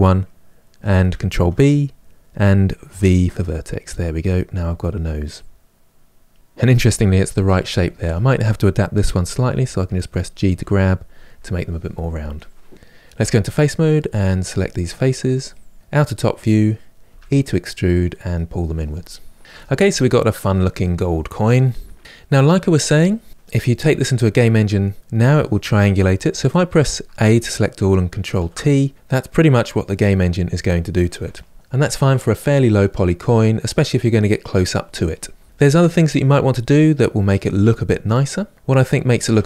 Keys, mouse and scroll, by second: 1.0 ctrl+b, 7.8 click, 9.2 g, 10.0 click, 10.2 g, 12.9 3, 13.6 click, 14.0 shift+click, 14.1 shift+click, 14.3 shift+click, 14.9 shift+click, 15.0 shift+click, 15.7-16.7 middle drag, 16.7 e, 19.4-22.3 middle drag, 26.3 a, 28.1 ctrl+t, 28.7-31.5 middle drag, 32.5-35.4 middle drag, 35.4 ctrl+z, 36.2-39.2 middle drag.